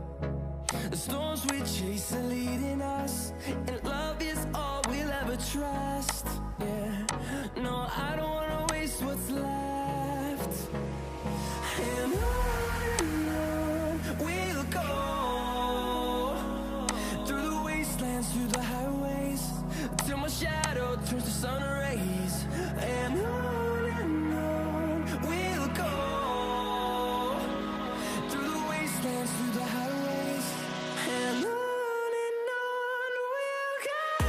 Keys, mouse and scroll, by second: 10.9-11.3 typing, 15.0-15.7 typing, 22.0-25.2 typing, 26.3-28.3 typing, 30.5-31.9 typing.